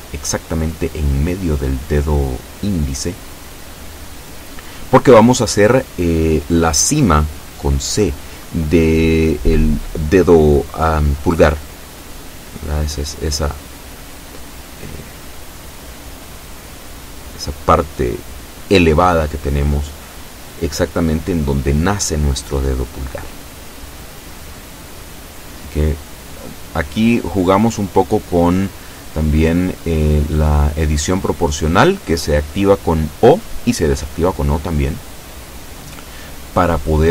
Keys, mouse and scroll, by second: 0.0 click, 1.0 ctrl+z, 1.8 o, 2.6-4.0 drag, 4.0-4.6 scroll down 4, 5.4 scroll down 2, 6.6 scroll down 2, 7.6 scroll up 2, 8.0 scroll down 2, 9.4 click, 13.9 KP_0, 15.2 KP_7, 16.4 shift+middle click, 20.8-22.6 shift+middle drag, 24.0 right click, 25.3 alt+shift+right click, 26.1-27.4 alt+shift+middle drag, 27.4 a, 28.3-28.8 scroll up 2, 30.4 KP_7, 31.4-32.5 shift+middle drag.